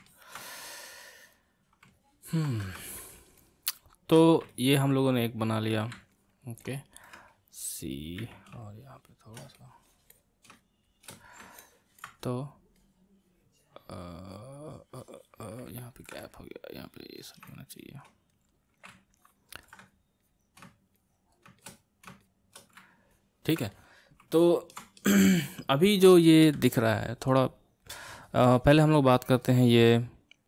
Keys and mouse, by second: 0.1-2.8 ctrl+middle drag, 2.8-4.5 shift+drag, 4.5-8.2 ctrl+middle drag, 8.2 c, 8.6-11.6 shift+drag, 11.6-16.3 ctrl+middle drag, 16.3-19.2 drag, 19.2 ctrl+middle click, 19.8-23.1 drag, 23.1-28.0 ctrl+middle drag.